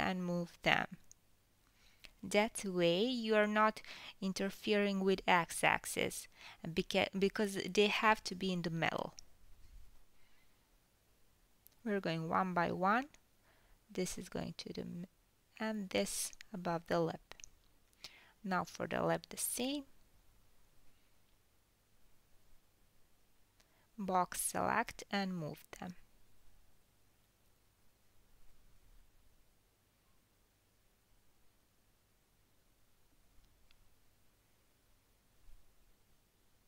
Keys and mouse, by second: 0.2 g, 2.1-2.6 middle drag, 2.6-5.1 drag, 3.9 g, 5.1-5.6 middle drag, 5.6-8.3 drag, 6.5 g, 8.3 middle click, 8.6-13.1 drag, 11.8 g, 13.1-13.5 middle drag, 13.5-16.3 drag, 14.5 g, 16.3-16.8 middle drag, 16.8-19.0 drag, 19.0-20.2 middle drag, 19.0 g, 21.5-24.3 drag, 22.9 g, 24.5-25.1 middle drag, 25.1-28.7 drag, 26.9 g, 29.7 KP_1, 29.9-30.9 middle drag, 30.9-33.2 drag, 32.0 g, 33.2-33.6 middle drag, 33.6-35.7 drag, 34.3 g, 35.7-36.3 middle drag, 36.3-36.6 drag.